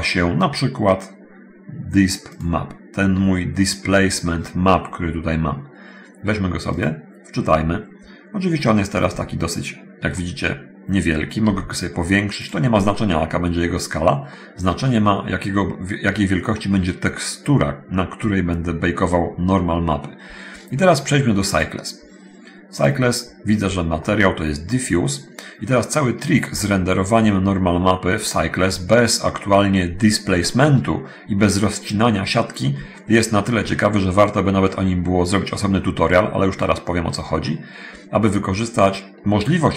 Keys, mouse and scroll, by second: 8.4-9.0 scroll up 1, 9.2 scroll up 1, 9.3 shift+middle click, 10.7 middle click, 11.4 s, 12.6 click, 12.9-14.3 middle drag, 15.2-16.6 middle drag, 16.7-17.9 middle drag, 21.7 click, 22.9 click, 24.2-25.6 middle drag, 25.8 scroll down 1, 26.4-27.4 shift+middle drag, 27.8 middle click, 28.8 middle click, 32.3 scroll up 1, 33.1 shift+middle click, 34.8-36.7 middle drag, 36.8 middle click, 37.6 middle click.